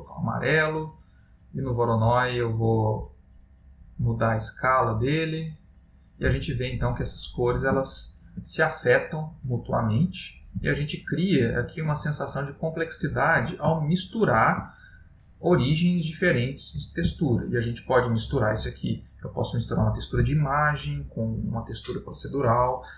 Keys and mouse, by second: 1.1 middle click, 3.0 click, 6.8 middle click, 8.1 ctrl+middle click, 8.6 middle click, 10.8 ctrl+middle click, 13.5 middle click, 14.3 middle click, 17.1 middle click, 17.3 ctrl+middle click, 18.5 ctrl+middle click, 19.5 click.